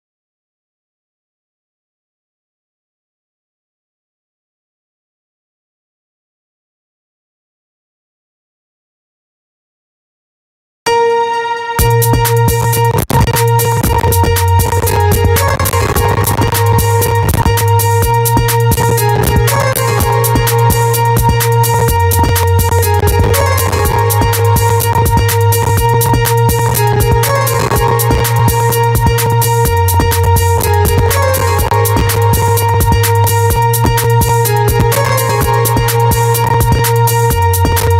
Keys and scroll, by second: 10.2 space.